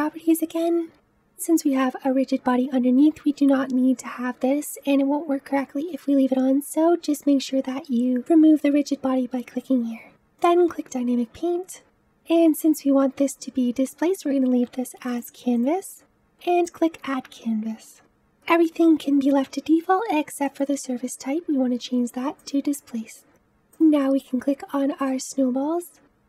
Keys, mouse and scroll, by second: 8.5 click, 11.4 click, 15.0 click, 16.5 click, 18.3-20.3 scroll down 11, 20.3-23.3 drag, 25.1-26.2 drag.